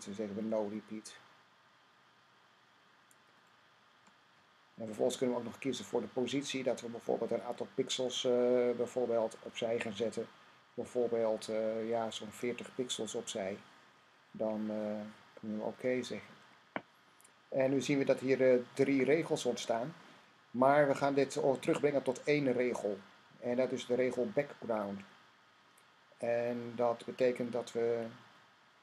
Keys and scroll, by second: 12.2-13.1 typing.